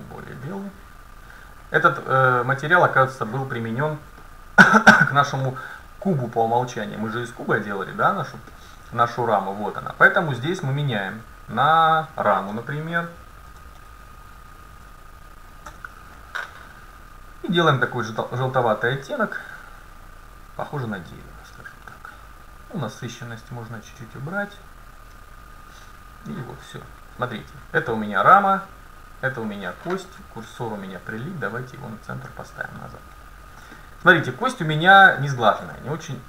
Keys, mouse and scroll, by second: 1.3-3.4 right drag, 3.6-5.4 middle drag, 5.4-8.5 scroll up 2, 8.5-9.7 middle drag, 9.7 scroll down 1, 11.2-13.8 drag, 17.8-20.6 drag, 28.0-29.8 drag, 28.9 right click, 30.4 right click, 30.5 shift+s, 33.1-36.2 middle drag.